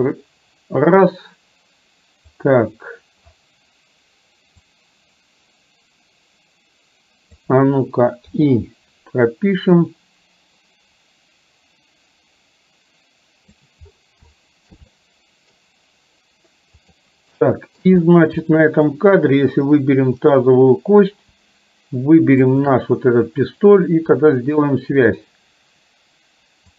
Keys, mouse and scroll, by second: 2.5 click, 4.8-7.6 drag, 8.3 i, 10.0-13.7 drag, 14.3 shift+middle click, 15.0 middle click, 17.0 click, 17.5 shift+middle click, 18.5 middle click, 20.5 click, 22.5 shift+click, 24.3 click.